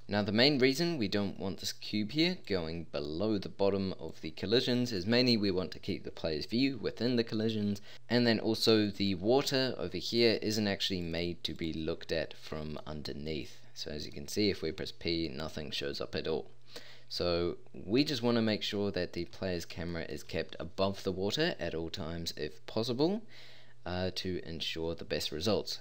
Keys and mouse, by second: 0.0 z, 4.6-10.1 middle drag, 13.0-13.4 middle drag, 14.8 p.